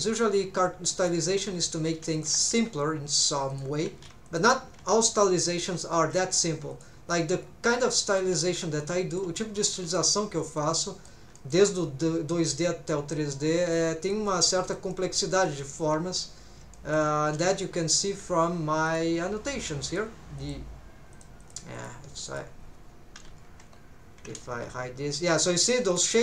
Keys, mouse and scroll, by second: 1.0 click, 1.4 alt+a, 1.9 alt+a, 2.1 alt+shift+click, 3.5 shift+click, 4.1 alt+a, 4.3 alt+shift+click, 5.5 shift+click, 6.0 r, 6.7 click, 7.1-7.5 scroll down 3, 7.7 middle click, 8.4 alt+h, 8.8 middle click, 9.8 shift+middle click, 10.2-10.6 scroll down 2, 10.6 middle click, 11.4 shift+middle click, 12.3 middle click, 13.4 scroll up 1, 13.7 middle click, 14.3 middle click, 14.9 middle click, 15.4 scroll up 1, 15.6 middle click, 16.7 shift+middle click, 17.3 n, 18.9 click, 19.9 click, 20.4 click, 21.1 click, 21.4 click, 21.8 click, 22.3 click, 22.6-23.1 scroll down 2, 23.2 n, 23.6 KP_1, 24.5 h, 25.0 scroll down 1, 25.8 scroll up 3.